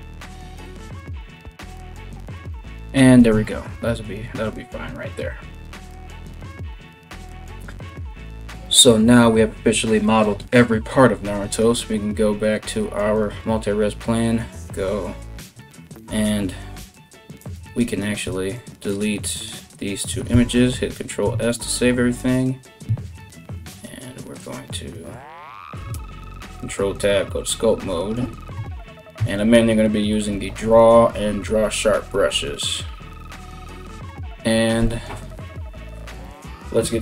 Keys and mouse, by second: 0.0-2.9 typing, 6.0 KP_1, 6.7 a, 6.8 a, 10.9 right click, 16.5 Tab, 17.0 right click, 17.3 Tab, 17.4 right click, 18.1 shift+right click, 18.8 x, 19.9 ctrl+s, 21.8 right click, 25.5 ctrl+Tab, 29.9-33.4 typing.